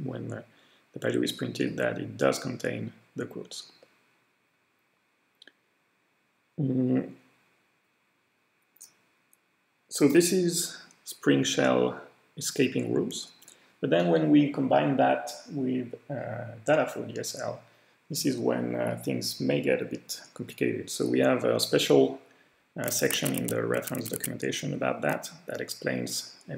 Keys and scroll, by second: 23.1 super+Tab, 23.4 super+Tab, 23.8 super+Tab.